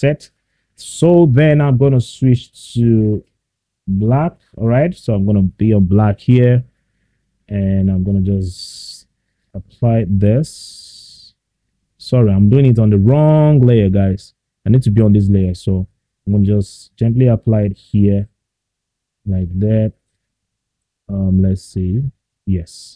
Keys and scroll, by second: 12.3 ctrl+z.